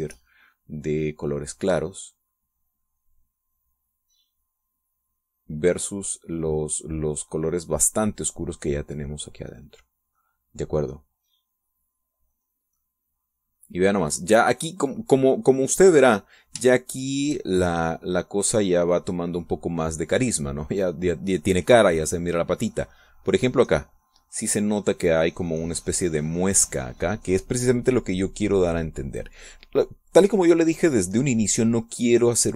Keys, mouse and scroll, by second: 0.8 ctrl+shift+click, 1.3-2.7 shift+drag, 2.8-4.3 drag, 4.3 middle click, 4.8-10.2 drag, 10.2 middle click, 10.6 click, 11.4 middle click, 12.0-14.7 drag, 15.1 middle click, 17.4-18.5 shift+drag, 18.6-22.0 shift+drag, 22.1-25.2 drag, 28.2 middle click, 29.9 middle click.